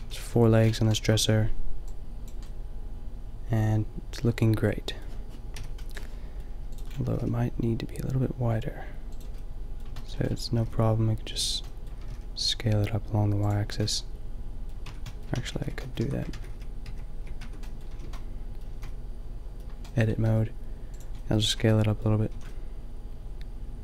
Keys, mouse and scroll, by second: 0.1 a, 5.6 KP_5, 7.1 s, 10.5 s, 12.0 s, 13.6 drag, 13.7 a, 14.8 Tab, 15.3 ctrl+z, 15.5 ctrl+z, 16.1 Tab, 16.4 ctrl+z, 16.8 ctrl+z, 17.4 Tab, 18.0 a, 18.1 a, 18.8 a, 20.2 s, 21.0-21.8 drag, 21.5 Tab, 22.4 a.